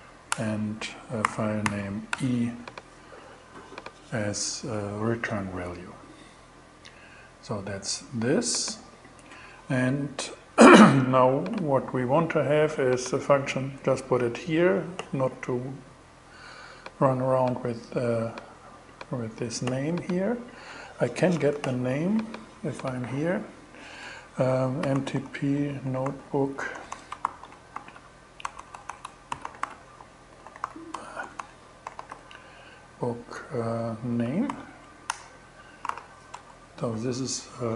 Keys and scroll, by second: 0.3 Return, 0.4-2.1 typing, 24.0-32.0 typing, 33.9 shift+n, 34.5 shift+Return, 35.1 alt+Return, 35.3 alt+5, 35.3 alt+6, 35.9 alt+shift+Return, 36.6 shift+Return.